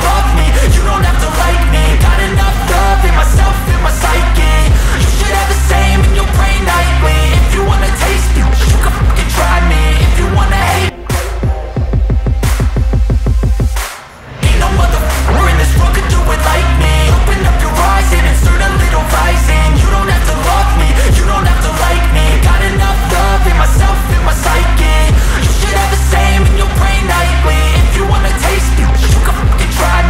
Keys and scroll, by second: 4.2 ctrl+z, 8.4 Up, 8.6 Left, 8.8 Down, 9.0 Left, 9.2 Up, 9.4 Down, 9.7 Right, 14.0 Delete, 17.6 Up, 17.9 Right, 18.7 Delete, 21.2 Up, 22.1 Up.